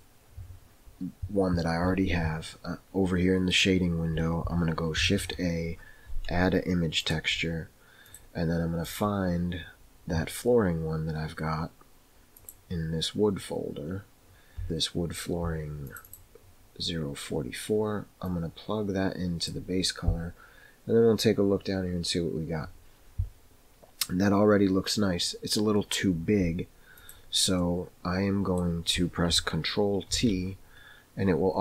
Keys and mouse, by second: 5.0 shift+a, 18.4-19.6 drag, 27.0 click, 27.7 middle click, 30.2 ctrl+t.